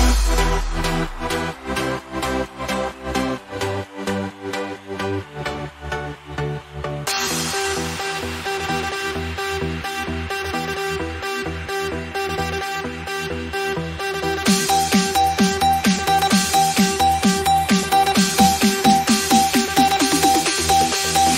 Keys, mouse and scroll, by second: 5.6 ctrl+d, 7.6-8.3 drag, 20.7-21.3 typing, 20.8 click.